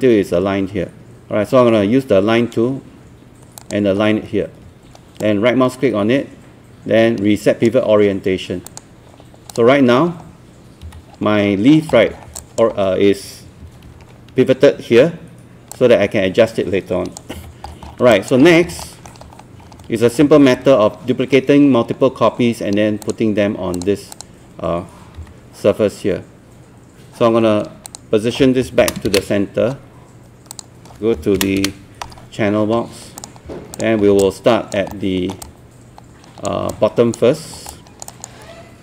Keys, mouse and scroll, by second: 3.6 click, 5.2-8.4 right drag, 8.7 click, 10.9 w, 11.1 scroll down 1, 12.4 alt+click, 12.7-13.6 scroll up 1, 13.6 typing, 15.0 e, 15.7 click, 17.3 z, 17.7 scroll down 1, 18.1 alt+click, 18.5 scroll down 1, 18.9 alt+middle click, 19.1 scroll up 1, 20.2 scroll down 1, 23.1 click, 25.2 w, 27.9 click, 28.8 KP_0, 29.1 KP_Decimal, 30.5 click, 31.4 KP_0, 32.7 scroll up 1, 33.2 click, 33.8 click, 34.1 scroll down 1, 34.3 alt+click, 34.9 alt+middle click, 35.5 alt+click, 36.7 alt+click, 37.3 scroll up 1, 37.7 alt+click.